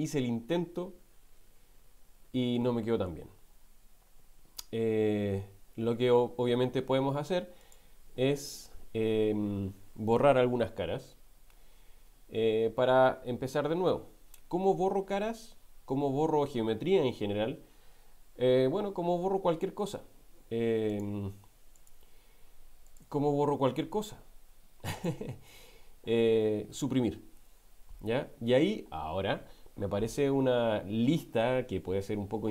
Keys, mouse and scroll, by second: 7.6 click, 8.6-10.2 middle drag, 18.9 Tab, 20.9 click, 21.7 click, 25.0 click, 27.4 Delete.